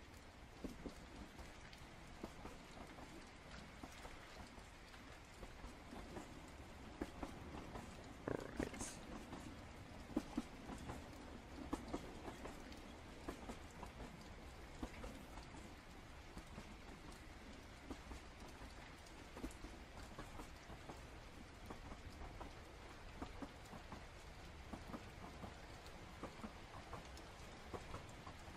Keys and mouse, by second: 0.4 click, 1.6 ctrl+z, 3.2 click, 4.0 ctrl+z, 4.4 click, 5.9 ctrl+z, 7.6 click, 8.9 ctrl+z, 9.2-10.4 drag, 10.7 ctrl+z, 10.9-12.8 drag, 13.6 click, 15.3 click, 16.2 ctrl+z, 16.7 click, 17.3 ctrl+z, 17.7 click, 18.6 ctrl+z, 18.9-20.5 drag, 22.1-23.1 drag, 25.5 click, 27.2-28.5 drag.